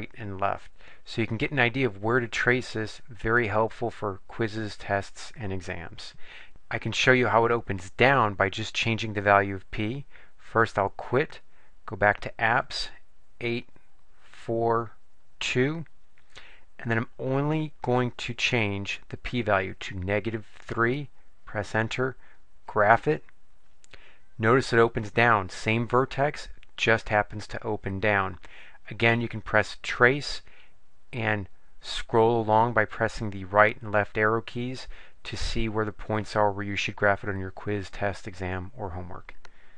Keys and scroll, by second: 0.4 Left, 0.8 Left, 1.5 Left, 2.2 Left, 3.4 Left, 4.5 Left, 5.0 Left, 13.4 8, 14.9 4, 15.4 2, 17.5 Down, 18.2 Down, 20.6 3, 21.4 Return, 31.4 Right, 32.2 Right, 32.9 Right, 34.1 Right, 35.2 Left, 35.8 Left, 36.8 Left, 37.2 Left, 38.4 Left, 39.0 Left.